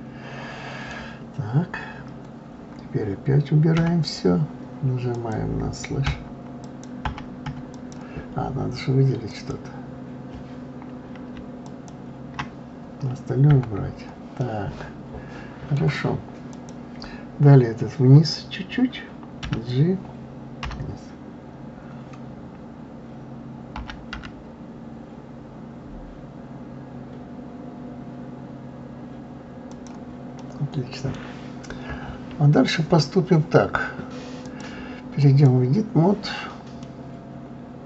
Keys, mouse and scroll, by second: 3.8 KP_Divide, 5.1 click, 6.1 KP_Divide, 6.6 click, 7.1 KP_Divide, 7.4 KP_Divide, 7.6 click, 9.3 click, 11.6 shift+click, 13.5 KP_Divide, 14.4-16.5 middle drag, 16.5 click, 19.4 g, 30.4-31.6 middle drag, 31.6-33.5 scroll up 2, 34.4-36.8 drag, 36.8-37.8 middle drag.